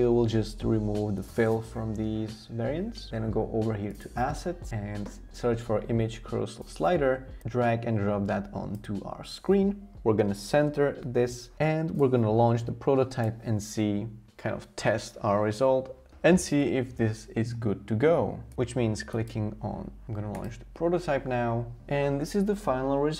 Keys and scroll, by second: 10.1 alt+h, 10.5 alt+v.